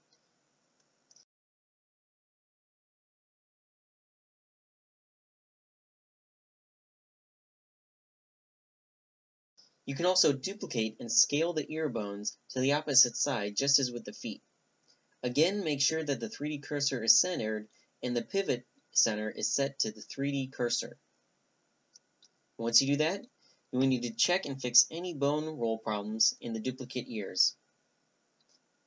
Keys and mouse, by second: 1.3-2.3 drag, 1.8 ctrl+n, 2.5 ctrl+n, 3.3 ctrl+n, 4.4-5.4 drag, 4.8 ctrl+n, 5.5 click, 7.4-9.4 middle drag, 10.3 shift+c, 11.2-15.0 drag, 15.0 shift+d, 15.7 s, 19.9 click, 20.0-21.4 middle drag, 21.4-22.2 drag, 22.2 middle click, 22.3 click, 23.1 ctrl+n, 23.5 click, 24.2 ctrl+n, 24.9-26.8 drag, 25.7 ctrl+n, 28.3 ctrl+n.